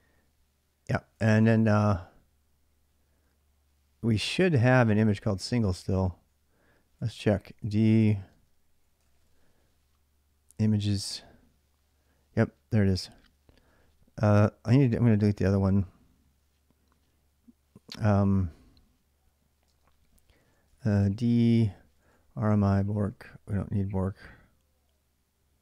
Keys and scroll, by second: 5.5 ctrl+a, 5.7 ctrl+a, 6.4-10.3 typing, 10.4 Return, 19.4-23.4 typing.